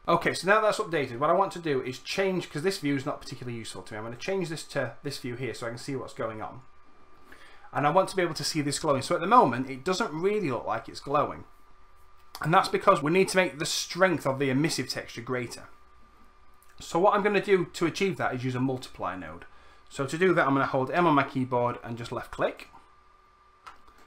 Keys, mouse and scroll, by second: 20.9-24.0 drag, 20.9 m.